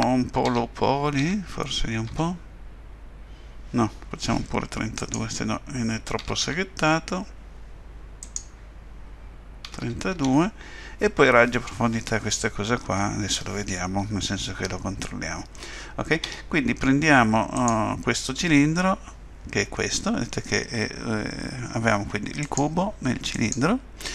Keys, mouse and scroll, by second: 6.2 3, 6.4 2, 8.2 click, 17.5 click, 22.4 click, 23.3 click.